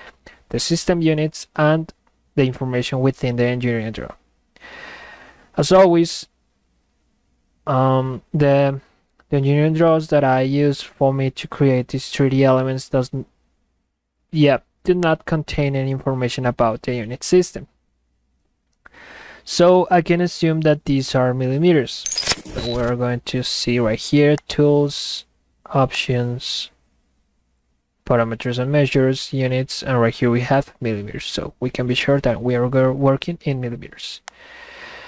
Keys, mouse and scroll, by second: 24.3 click, 25.9 click, 34.3 click.